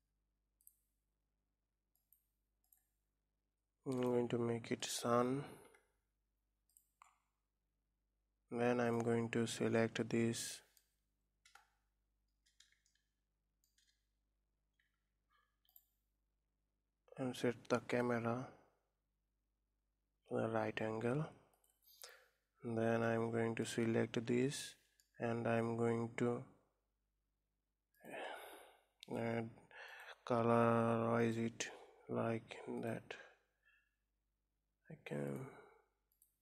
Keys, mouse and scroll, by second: 1.1 click, 6.6 click, 7.4 scroll up 3, 9.3 click, 9.8-10.4 scroll up 2, 10.4-11.4 middle drag, 11.4 KP_0, 12.1-12.8 scroll up 2, 12.8-13.8 shift+middle drag, 13.8 scroll down 2, 15.7 q, 21.8 scroll up 2, 23.0 middle click, 23.8 scroll up 1, 24.4-26.3 shift+middle drag, 26.3 scroll up 1, 28.5-30.0 drag, 32.7 click.